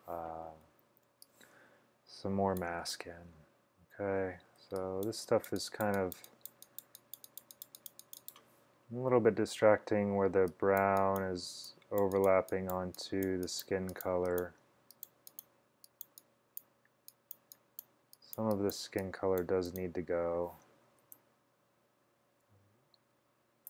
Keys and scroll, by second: 0.6-1.1 typing, 9.0-10.0 typing, 13.2 typing, 21.2 super+z, 23.2 alt+super+z.